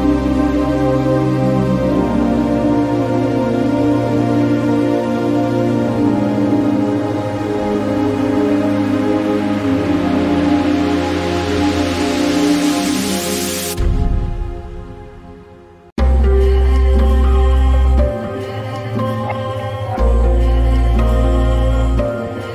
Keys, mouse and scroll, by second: 10.8-22.2 drag.